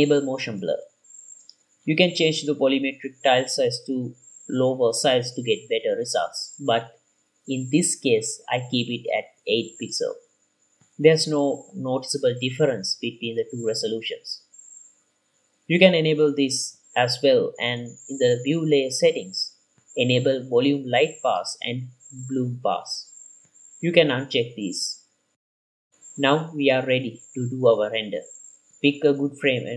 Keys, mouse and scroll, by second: 0.8 click, 3.1 click, 4.0-5.3 drag, 6.7-8.8 drag, 9.7-10.7 drag, 14.4-16.5 drag, 17.3-18.4 drag, 18.6 click, 19.1-19.7 middle drag, 19.1-19.7 scroll down 4, 20.3-21.2 drag, 22.1 click, 23.3 click, 24.1 click, 24.9 click, 26.1 click, 27.3 click, 29.0 ctrl+s.